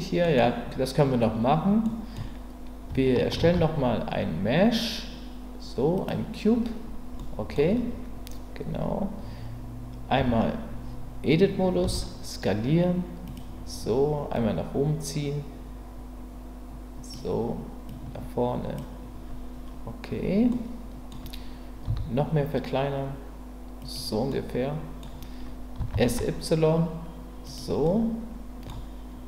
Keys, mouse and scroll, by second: 0.2 middle click, 1.9 middle click, 3.4 shift+a, 7.2 middle click, 10.2 Tab, 11.8 s, 13.2 click, 14.4-17.1 drag, 17.9 click, 20.5 middle click, 21.8 s, 23.8 click, 24.4 middle click, 25.8 s, 26.0 y, 27.4 click, 27.8 middle click, 28.7 scroll down 1.